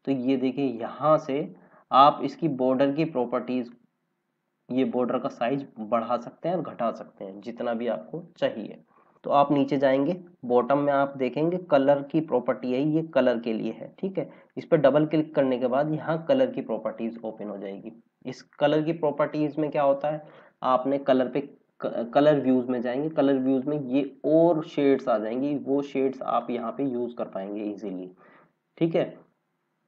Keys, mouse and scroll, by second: 3.6 click, 6.8 scroll down 1, 14.2 click, 17.1 click.